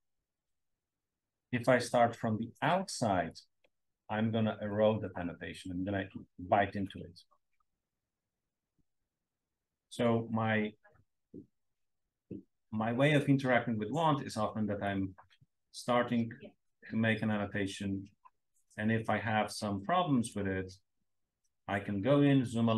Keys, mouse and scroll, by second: 3.2-7.7 alt+drag, 9.3 scroll up 2, 9.5-12.3 scroll down 2, 10.9 space, 11.1 click, 12.3-12.9 scroll up 1, 12.9-14.7 scroll down 1, 14.7 click, 14.7-16.7 scroll down 1, 15.7-20.5 drag, 16.7-17.3 scroll down 1, 17.3-20.5 scroll down 1, 20.5 scroll down 1, 20.6-21.8 scroll up 2.